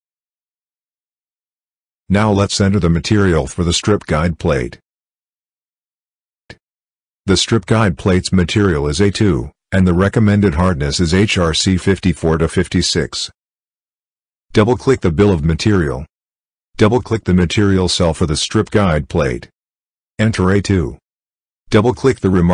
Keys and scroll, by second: 10.5 ctrl+c.